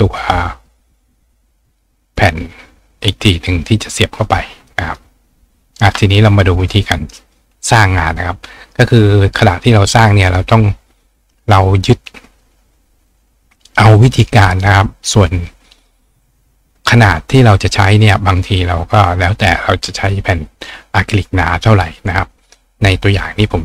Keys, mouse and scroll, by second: 0.2 click, 2.2-5.0 drag, 5.7 click, 6.6 click, 7.0 right click, 8.7 right click, 15.2 click.